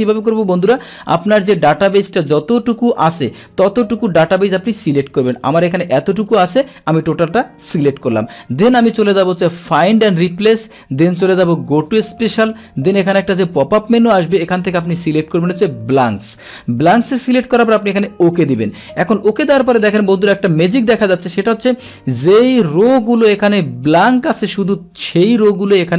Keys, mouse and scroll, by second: 1.7-5.3 drag, 6.5-8.5 middle drag, 11.9 click, 13.1-14.2 drag, 15.9 click, 18.2 click.